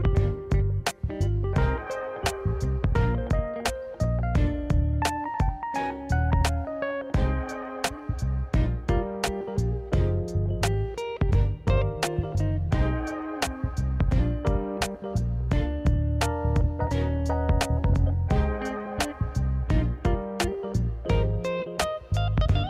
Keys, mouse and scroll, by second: 1.3 click, 1.6 middle click, 2.5 middle click, 3.1 KP_1, 3.9 click, 4.6 shift+d, 6.1 click, 6.7 s, 8.1 click, 8.7 s, 9.6 click, 10.7-12.0 drag, 12.1 s, 12.9 click, 13.2 r, 15.1 click, 16.4 click, 16.9 middle click, 19.4 KP_1, 20.1 s, 21.5 click, 21.9 click, 22.5 click.